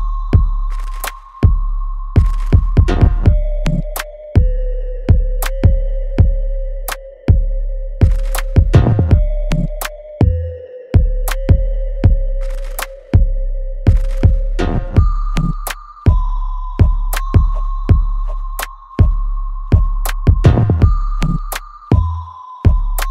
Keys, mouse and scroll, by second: 1.7 right click, 2.3 click, 2.6 alt+middle click, 3.0-6.2 alt+drag, 6.2 right click, 7.2-11.8 drag, 11.8 shift+right click, 14.9 click, 15.1-17.4 alt+drag, 17.4 space, 18.6 alt+middle click, 19.8 click, 20.3 right click, 21.4-23.1 drag.